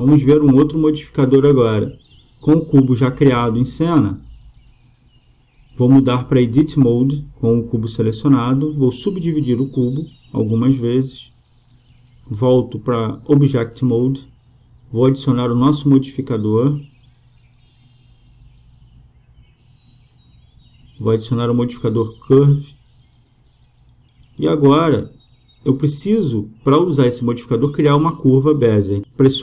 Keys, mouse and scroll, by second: 5.6-7.4 drag, 9.0-12.0 drag, 13.7 click, 18.3-20.0 drag, 26.8-29.4 drag.